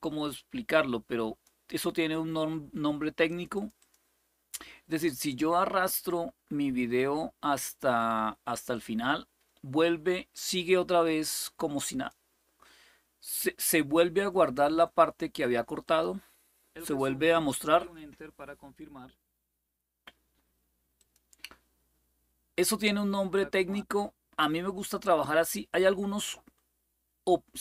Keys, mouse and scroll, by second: 0.0-1.2 drag, 3.0 click, 8.5-11.9 drag, 15.6 click, 20.7 click, 23.1-25.2 drag.